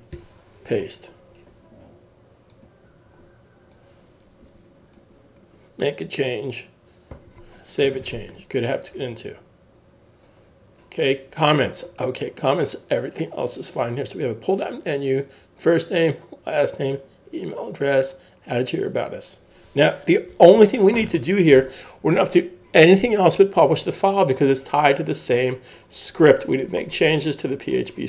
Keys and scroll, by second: 0.1 super+v, 7.1 super+s, 20.6 super+s.